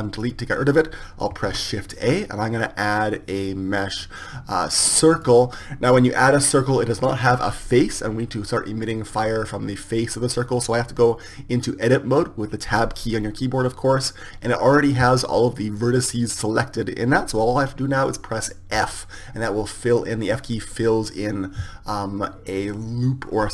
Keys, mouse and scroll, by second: 1.7 shift+a, 13.3 Tab, 19.3 f.